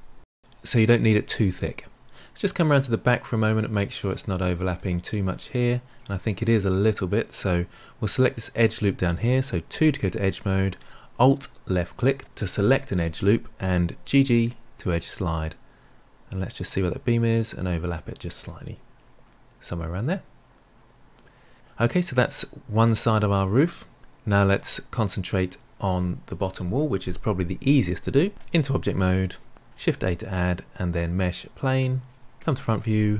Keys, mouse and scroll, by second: 2.1-9.5 middle drag, 9.7 2, 11.7 alt+click, 14.0 g, 18.4-21.5 middle drag, 24.0-26.4 middle drag, 28.3 Tab, 29.5 ctrl+a, 32.3 KP_1.